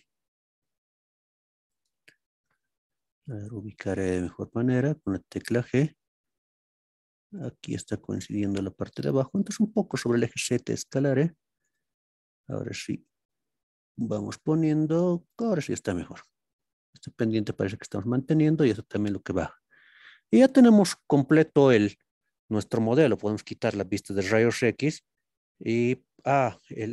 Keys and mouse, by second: 2.1 shift+drag, 9.0 click, 11.6 click, 12.5 g, 15.3-22.0 drag, 22.0-22.8 middle drag, 24.0 click, 24.8-26.1 middle drag.